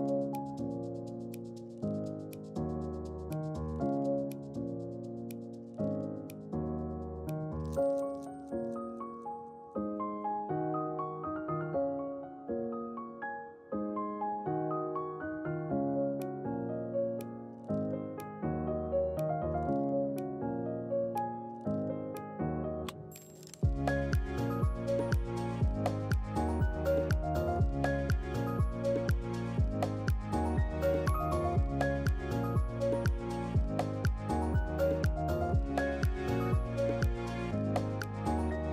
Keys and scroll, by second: 2.8 ctrl+q, 4.1 ctrl+q, 6.8-7.9 typing, 17.0-18.5 typing, 21.3 ctrl+q, 24.1 ctrl+q, 29.4 1, 30.0 Return.